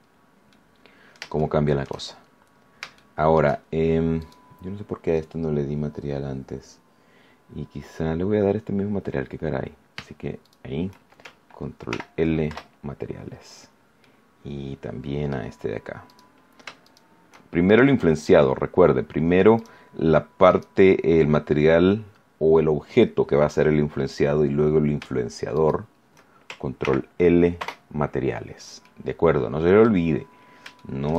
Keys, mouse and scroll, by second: 0.5 middle click, 1.3 shift+middle click, 2.1-2.7 shift+scroll up 5, 2.9 shift+middle click, 4.1 right click, 10.4 shift+right click, 11.9 ctrl+l, 13.0 ctrl+Return, 13.3-13.9 scroll down 4, 13.9-15.5 middle drag, 16.0 right click, 16.8 shift+right click, 17.6 shift+right click, 19.5 right click, 20.5 right click, 25.5 shift+right click, 26.7 ctrl+l, 27.5 ctrl+Return, 28.3-28.7 scroll down 2, 28.8-30.0 middle drag, 30.1-30.4 scroll up 2, 30.7 shift+middle click.